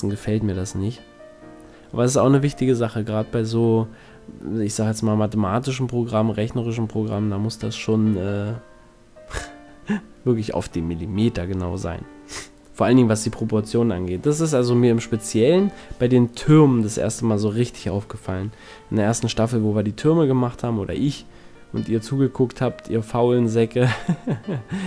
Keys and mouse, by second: 0.1 ctrl+z, 1.9 middle click, 2.9 a, 4.7-6.2 middle drag, 6.3 middle click, 6.5 middle click, 11.0 KP_1, 13.0 KP_7, 13.6 click, 14.6 z, 16.9 KP_1, 18.7 KP_7, 21.8 KP_1, 22.3 z, 23.0 shift+a.